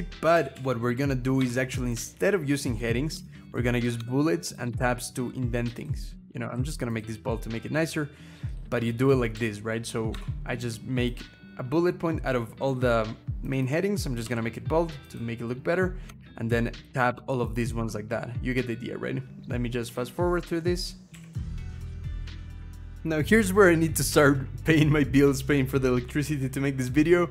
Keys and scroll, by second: 0.2 Delete, 0.3 Delete, 1.2 -, 2.9 Tab, 6.2 ctrl+b, 8.9 BackSpace, 9.1 Delete, 9.9 -, 14.0 ctrl+b, 15.9 Tab, 20.9 Delete, 21.1 Delete, 21.4 -, 21.6 Down, 21.6 Tab, 21.7 Up, 21.8 Down, 22.3 scroll down 2, 22.4 BackSpace, 22.5 -, 22.6 Tab, 22.6 Down, 22.8 BackSpace.